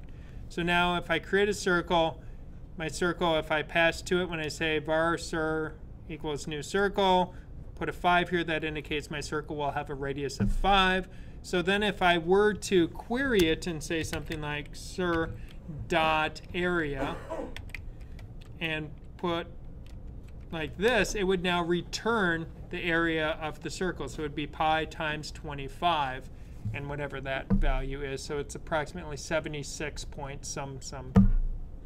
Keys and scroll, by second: 13.9 c, 17.5-18.3 typing, 19.9-20.4 typing.